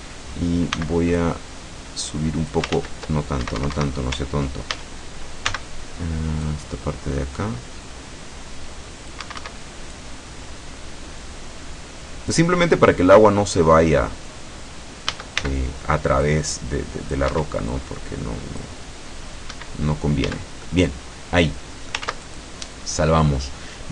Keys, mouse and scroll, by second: 0.0 a, 0.8 c, 1.3-2.8 drag, 2.9 ctrl+z, 3.5 Escape, 4.8 ctrl+a, 5.5 c, 6.5-9.4 drag, 9.3 Escape, 10.0-12.6 drag, 15.2 a, 15.5 c, 16.3-17.4 drag, 17.4 Escape, 17.8-18.9 drag, 19.6 Escape, 20.3 a, 20.7-22.1 middle drag, 22.1 ctrl+s, 22.3 ctrl+click.